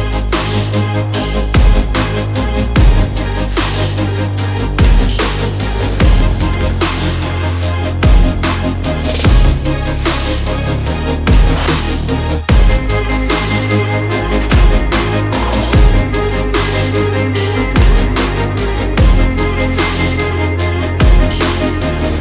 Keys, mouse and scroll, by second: 5.0 shift+z, 8.9 KP_0, 10.1 ctrl+s, 13.0 shift+c, 14.6 shift+a, 19.1 shift+a.